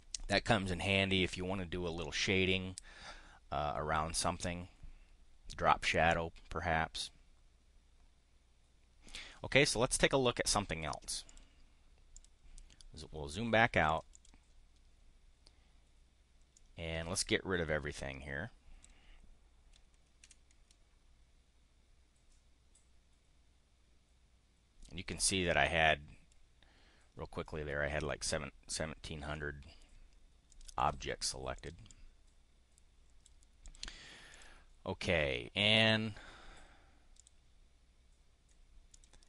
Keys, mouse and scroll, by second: 11.3 click, 12.1 click, 13.9 click, 14.1 click, 16.5-18.9 drag, 20.2 Delete, 29.3 click, 30.5 click, 30.8 click, 31.5 click, 32.1-33.3 drag, 33.6 click, 34.2 click, 35.7 click, 37.1 click, 38.9 click.